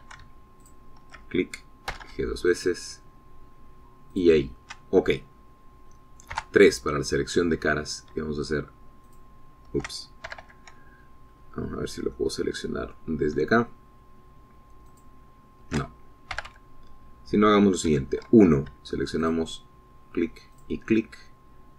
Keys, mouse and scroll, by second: 0.1 alt+shift+Caps_Lock, 1.2 a, 2.0 alt+shift+click, 3.3 g, 5.5 shift+click, 7.7 3, 10.5 alt+shift+click, 10.8-12.2 alt+shift+middle drag, 11.7 shift+a, 12.7-13.4 scroll up 4, 13.5 click, 14.5 shift+middle click, 16.3 alt+shift+click, 17.8 a, 19.3 1, 20.6 alt+shift+click.